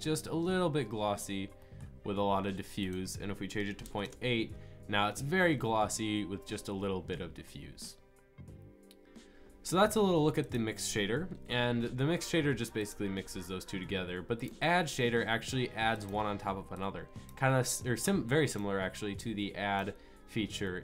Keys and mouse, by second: 0.4 middle drag, 11.3 Delete, 17.3-20.8 drag.